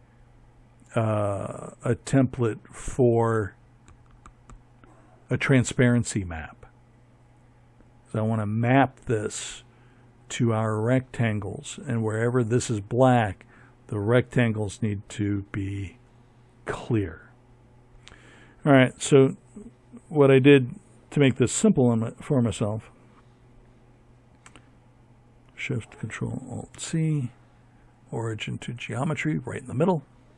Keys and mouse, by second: 20.5 z, 24.7 ctrl+alt+shift+c, 28.6 r.